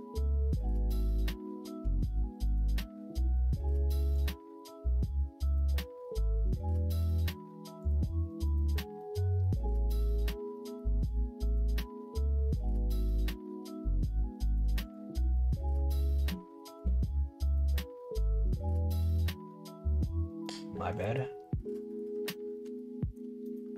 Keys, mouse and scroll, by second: 4.1 click, 6.9 click, 11.0-20.0 drag, 20.9 click, 22.7 alt+click, 23.4-23.7 middle drag.